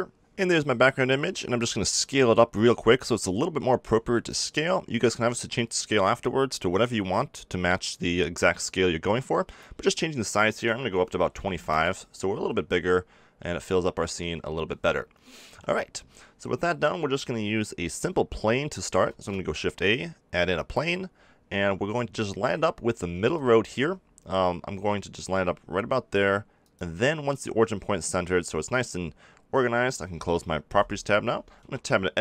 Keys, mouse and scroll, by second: 3.4-5.1 drag, 5.1-8.6 middle drag, 8.6-10.2 drag, 10.4 middle click, 12.6-13.8 middle drag, 15.4 KP_7, 17.8 middle click, 19.0 shift+a, 23.1 g, 30.6 n, 31.6 Tab.